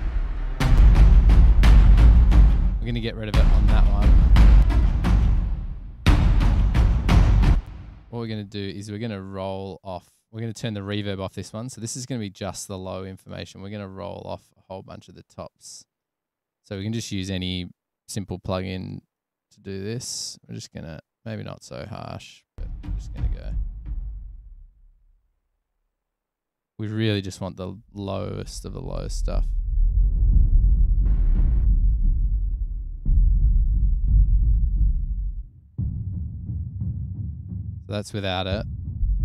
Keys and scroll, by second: 7.7 space, 22.7 space.